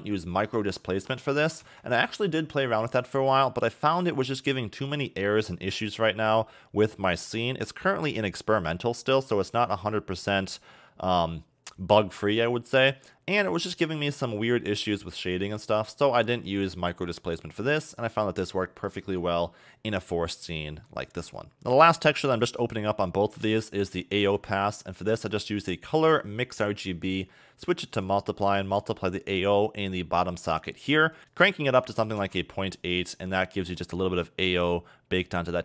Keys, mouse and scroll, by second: 0.1 click, 3.9 scroll down 1, 10.9 middle click, 16.0 scroll down 2, 16.2 middle click, 18.8 middle click, 20.1 middle click, 21.4 click, 23.1-24.5 scroll up 4, 24.5 shift+a, 27.1 click, 28.8 click, 31.2 click, 31.3 click, 33.0-33.5 scroll down 7, 33.5 middle click, 33.8 scroll up 3, 34.4 scroll down 1.